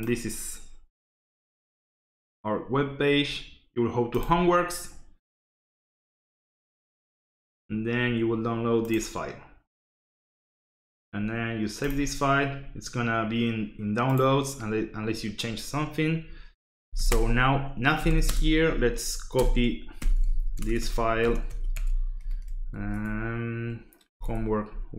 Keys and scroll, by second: 16.8 l, 17.1 Return, 18.0 c, 18.2 space, 18.5 shift+`, 20.0-22.7 typing, 22.9 Tab, 23.8-24.9 typing.